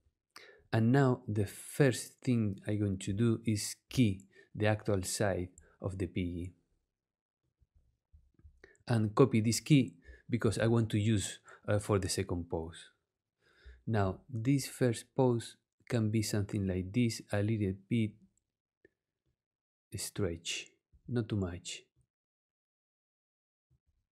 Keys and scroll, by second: 10.4 super+c.